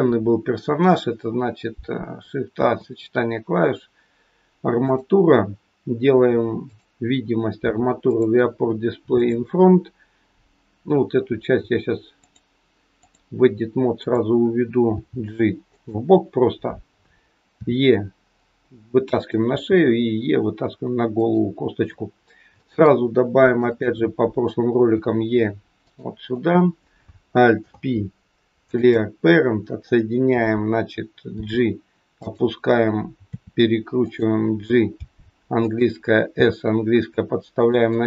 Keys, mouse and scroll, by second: 2.4 shift+a, 6.7 click, 8.1 click, 9.2 click, 12.1 click, 14.1 click, 14.8 g, 17.5 e, 19.4 e, 22.2 scroll down 1, 22.5 shift+middle click, 23.3 click, 23.7 click, 24.8 e, 26.3 click, 27.5 alt+p, 31.3 g, 33.3 r, 34.9 g, 36.3 s.